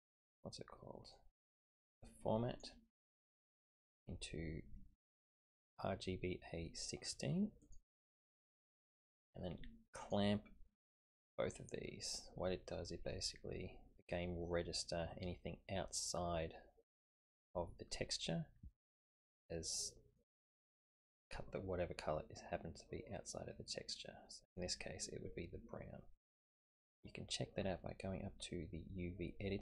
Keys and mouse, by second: 1.1-2.6 drag, 3.1-7.8 drag, 10.1 click, 11.0 click, 12.3-14.1 middle drag, 19.3-20.3 middle drag, 20.7 middle click, 22.4-24.6 middle drag.